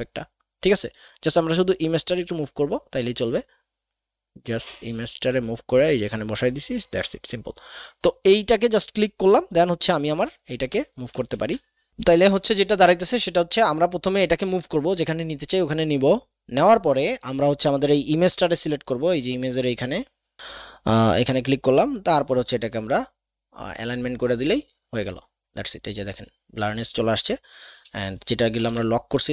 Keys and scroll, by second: 11.3 ctrl+z, 28.6 ctrl+alt+KP_2.